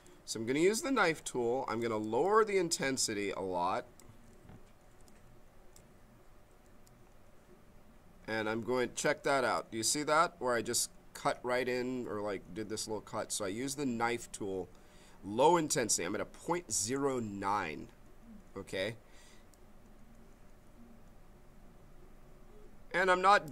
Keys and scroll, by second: 0.7 b, 2.0 m, 5.0 b.